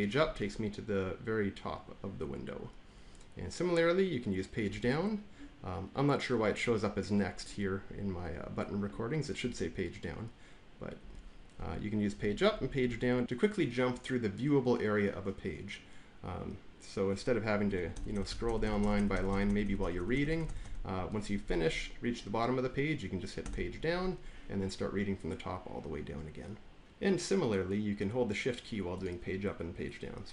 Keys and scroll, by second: 4.6 Page_Down, 9.3 Page_Down, 12.0 Page_Down, 12.0 Page_Up, 12.4 Page_Up, 12.7 Page_Up, 17.8 Down, 17.8 Down, 18.0 Down, 18.2 Down, 18.3 Down, 18.5 Down, 18.7 Down, 18.8 Down, 19.2 Down, 19.3 Down, 19.5 Down, 19.7 Down, 19.9 Down, 20.2 Down, 20.3 Down, 20.5 Down, 23.3 Page_Down.